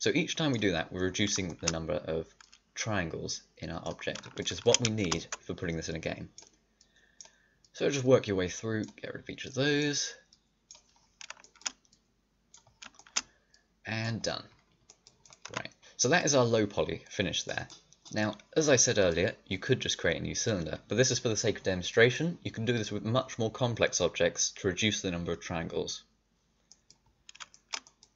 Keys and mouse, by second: 0.7 middle click, 1.4 click, 2.3 middle click, 2.9-4.0 drag, 4.0 middle click, 5.8 middle click, 5.9 click, 6.7 middle click, 15.4 a, 17.5-18.6 drag.